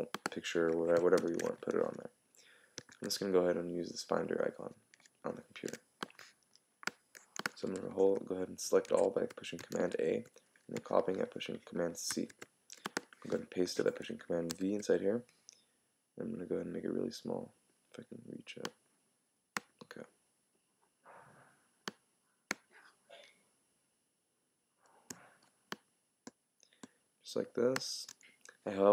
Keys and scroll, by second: 1.2 super+i, 2.9 super+w, 12.1 super+c, 14.5 super+v.